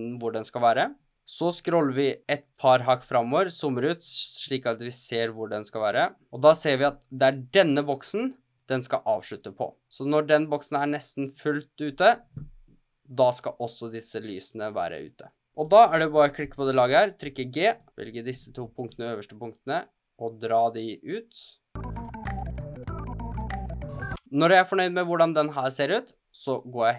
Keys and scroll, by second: 23.3 Right.